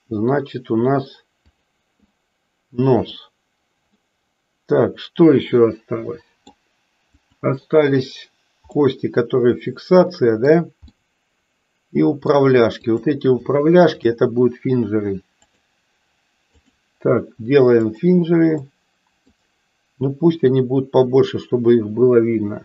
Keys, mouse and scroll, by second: 1.5 click, 2.2 middle click, 3.8-6.5 middle drag, 7.1 click, 8.8-10.6 middle drag, 11.0-12.5 middle drag, 12.8 click, 15.4-16.9 drag, 18.0 click, 18.6 middle click, 20.5-22.6 drag.